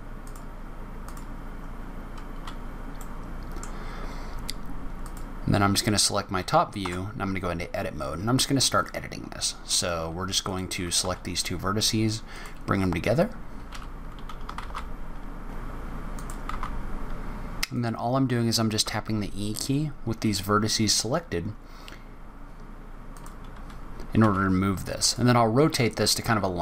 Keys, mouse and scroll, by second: 0.1 click, 0.9 click, 2.9 middle click, 4.9 click, 5.6 scroll down 3, 6.1 scroll up 2, 6.7 Tab, 7.7 scroll up 1, 8.6 click, 10.3 shift+click, 10.9 s, 13.6 g, 15.6 click, 15.7 shift+click, 15.7 s, 15.9 g, 16.4 e, 16.4 r, 18.7 e, 24.1 r, 25.6 e.